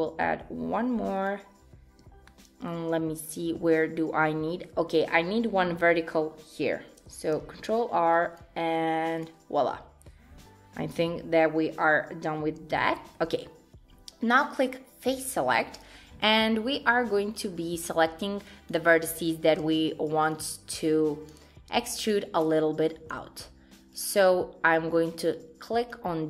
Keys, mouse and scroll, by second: 2.3 shift+middle click, 2.7 shift+scroll down 1, 7.4 ctrl+r, 12.3-12.6 scroll down 1, 12.8 shift+middle click, 15.0 click, 18.0 click, 20.0 shift+click.